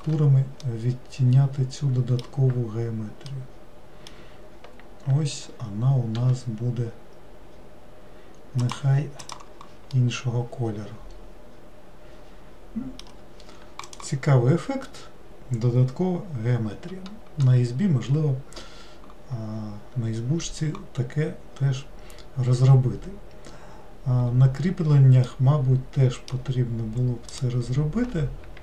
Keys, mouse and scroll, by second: 0.7-6.2 middle drag, 6.2 g, 9.3 click, 10.1-13.1 middle drag, 25.4-27.4 middle drag, 27.4 click.